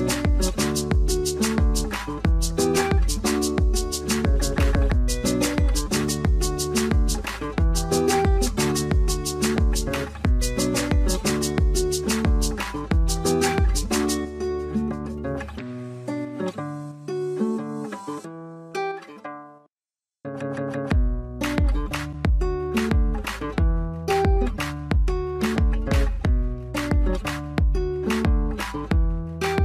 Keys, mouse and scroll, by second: 9.3-13.0 scroll down 1, 16.9 2, 17.0 Return, 22.5 scroll down 1, 23.1 alt+middle click, 24.1 scroll up 1, 24.4 middle click, 24.7 scroll up 1, 26.6 double click.